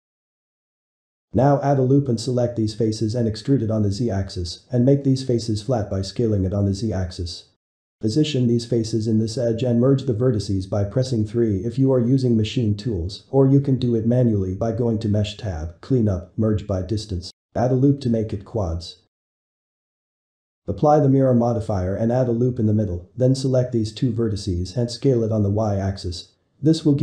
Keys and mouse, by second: 1.3-2.6 ctrl+middle drag, 2.6 ctrl+r, 3.6 middle click, 4.0 s, 5.7 middle click, 6.2 Tab, 7.3 ctrl+shift+Tab, 8.2 ctrl+shift+Tab, 9.4 click, 9.8 shift+click, 10.1 middle click, 10.6 e, 11.9 alt+a, 12.5-14.1 middle drag, 14.1 g, 15.2 middle click, 15.6 3, 16.2 shift+middle click, 17.1 ctrl+r, 18.1-20.2 shift+middle drag, 20.2 Tab, 21.3 click, 21.8 Tab, 23.0 ctrl+r, 23.9-24.5 middle drag, 24.5 Tab, 25.0-25.4 shift+middle drag, 25.4 click, 26.1 shift+drag, 26.7 s.